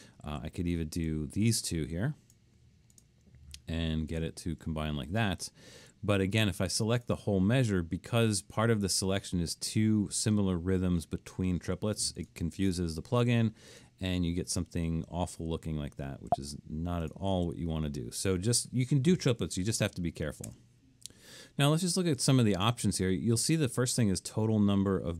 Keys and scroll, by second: 0.3 super+z, 5.8 super+z, 16.3 super+z, 17.3 super+z, 19.8 BackSpace.